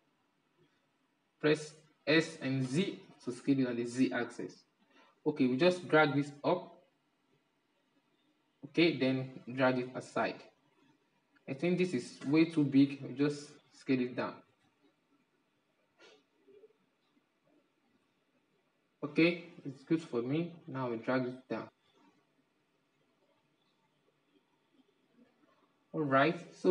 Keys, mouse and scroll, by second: 1.6 s, 5.1-8.2 drag, 8.9-10.1 drag, 10.1-11.6 middle drag, 11.6 Tab, 14.1 alt+s, 17.6-19.3 middle drag, 19.3 Tab, 20.0-23.0 drag, 25.0-26.7 middle drag.